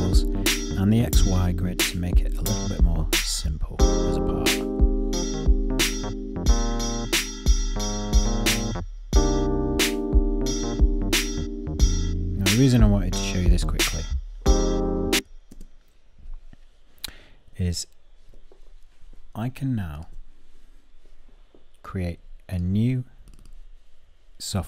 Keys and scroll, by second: 15.1 p.